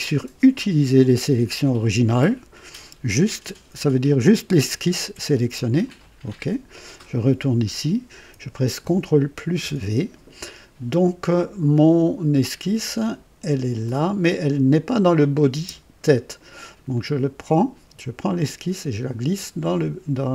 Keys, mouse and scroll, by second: 5.8 click, 7.2 click, 9.4 v, 13.8 click, 14.4 click, 15.2 click, 15.5 space, 16.9-19.7 drag.